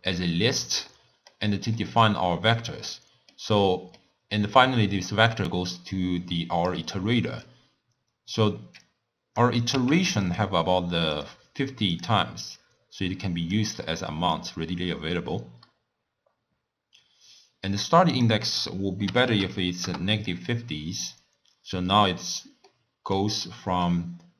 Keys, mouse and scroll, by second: 0.9-6.7 middle drag, 7.1-8.8 middle drag, 8.8 click, 9.6 click, 9.8 w, 12.6 click, 14.5 click, 18.1-21.1 drag, 22.7-24.3 middle drag.